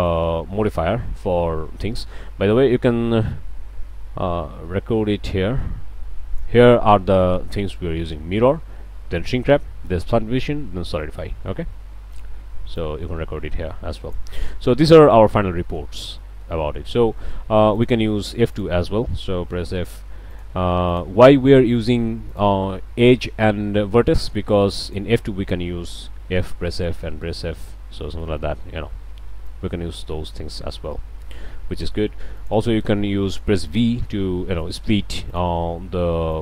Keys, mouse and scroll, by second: 5.3 click, 5.8 middle click, 12.7 click, 13.1 middle click, 14.5-14.9 scroll up 2, 15.1 middle click, 15.3 Tab, 15.6-16.0 middle drag, 16.0 scroll down 1, 16.2 middle click, 16.6 scroll up 1, 16.9-17.5 shift+middle drag, 17.7-18.8 shift+drag, 19.7 f, 20.3 drag, 20.9 click, 22.3 shift+click, 24.2-24.5 drag, 24.8 drag, 26.2 f, 27.5 f, 28.0-28.4 ctrl+drag, 28.4 ctrl+z, 29.5-30.5 drag, 30.5 alt+a, 30.6 middle click, 30.9-31.5 drag, 31.5 middle click, 31.8-32.1 drag, 32.4 drag, 32.9 scroll up 1, 34.1 v, 35.3 click, 36.3-36.4 drag.